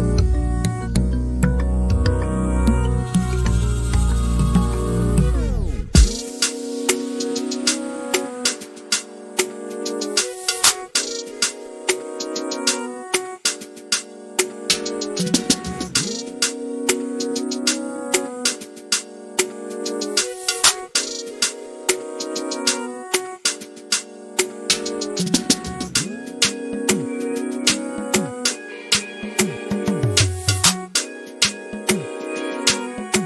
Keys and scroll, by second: 3.1 m, 4.8-5.7 typing, 6.8-7.5 typing, 8.9 l, 11.0 l, 13.3 l, 15.0-16.2 typing, 18.3 f, 19.4 l, 21.4-22.9 typing, 24.5-25.2 typing, 29.7 p, 31.1 space.